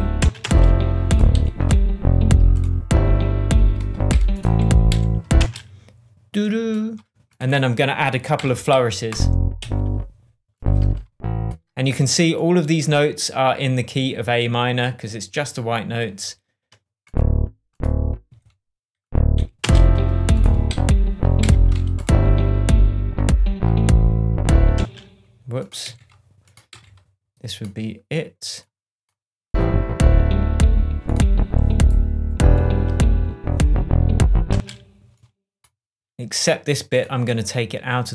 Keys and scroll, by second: 0.2 space, 1.3 Right, 4.0 p, 4.8 Left, 5.4 space, 8.3 p, 9.5 Up, 18.2 Right, 19.3 Right, 19.6 space, 20.6 Right, 21.4 p, 24.7 space, 25.8 Left, 34.5 space.